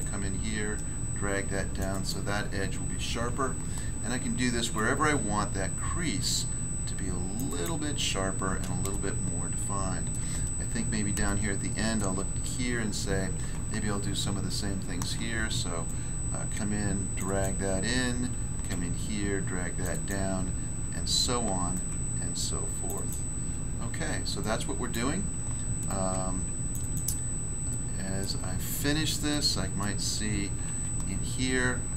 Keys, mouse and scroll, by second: 1.7 click, 1.9 click, 2.1 click, 2.4 scroll down 1, 4.4 ctrl+r, 4.7 click, 7.3 click, 7.5 click, 7.6 click, 7.9 scroll down 1, 8.9 shift+middle click, 10.5 scroll up 1, 11.2 shift+middle click, 12.3 scroll up 1, 15.0 ctrl+r, 15.8 click, 17.1 click, 17.2 click, 17.4 click, 18.3 ctrl+r, 18.7 click, 19.8 click, 19.9 click, 20.0 click, 21.4 ctrl+r, 21.7 ctrl+click, 22.8 ctrl+click, 22.9 ctrl+click, 24.9 click, 25.5 ctrl+r, 25.8 ctrl+click, 26.0 ctrl+r, 27.2-27.7 scroll down 1, 27.7 middle click, 28.2 middle click, 28.5 scroll up 1, 29.3 middle click, 29.8 middle click, 31.6 ctrl+r.